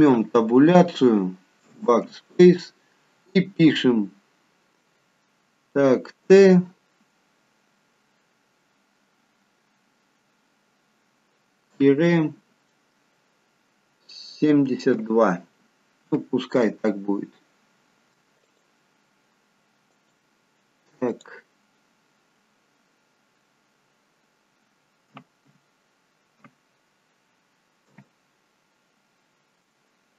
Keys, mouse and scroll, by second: 0.2 Tab, 1.7 BackSpace, 2.4 BackSpace, 6.3 shift+t, 12.6 -, 15.0 7, 16.1 2, 18.5 click, 19.9 right click, 25.1 Left, 25.4 Left, 26.8 Left, 27.9 t.